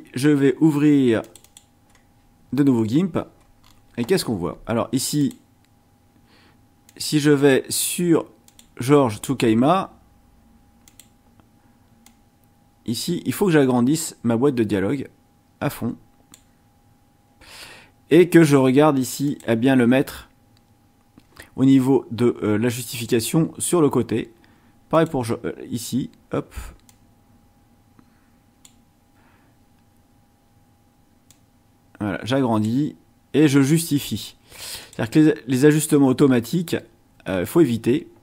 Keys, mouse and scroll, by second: 1.2 click, 3.6 scroll up 1, 4.1-4.4 scroll up 1, 5.2 click, 6.9 click, 8.4 click, 10.8 click, 12.0-16.5 drag, 19.2 click, 24.9 click, 26.9-28.8 drag, 31.3-32.8 drag, 34.8 click.